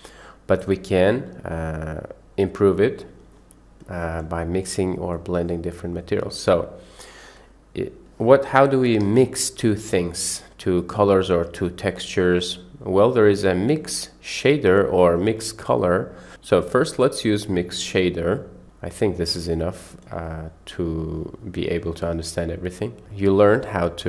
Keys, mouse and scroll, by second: 3.8 click, 4.2-4.6 drag, 5.1 click, 6.0 click, 9.4 shift+a, 20.7 click, 21.7 middle click, 22.4 click, 23.1-23.8 drag.